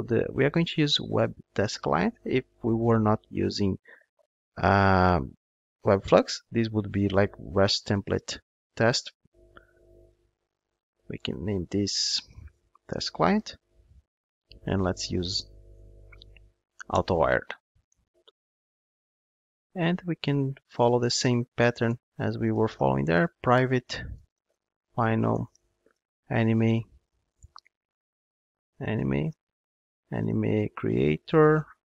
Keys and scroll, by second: 1.7 Return, 13.0 Return, 27.4 alt+Return.